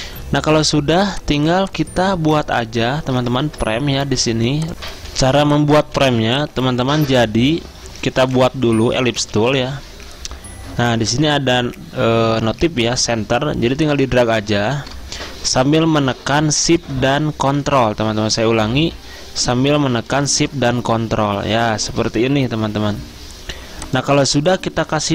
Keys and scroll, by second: 3.5 ctrl+z, 4.7 ctrl+s, 4.7 alt+Tab, 5.0 z, 5.9 z.